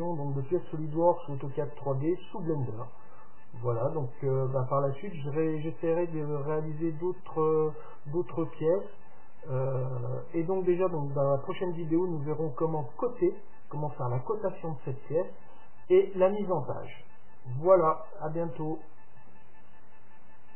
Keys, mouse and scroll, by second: 12.9-14.9 middle drag.